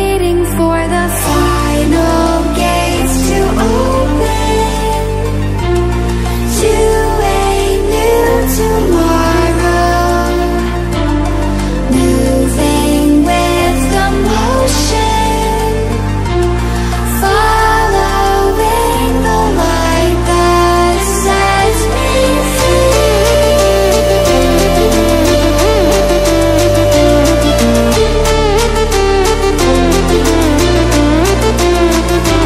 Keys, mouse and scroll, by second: 2.1-3.4 scroll down 1, 3.4 click, 4.7-5.5 scroll down 1, 7.1-7.4 scroll up 1, 8.8 click, 12.3 right click, 13.7 click, 14.8 right click, 16.0-21.8 drag, 21.8 right click, 22.9 click, 24.4 right click.